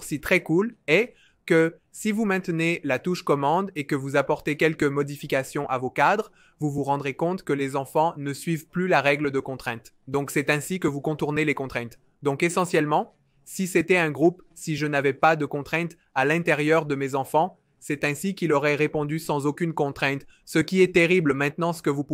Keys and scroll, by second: 8.1 super+z, 18.3 super+z, 18.7 super+z.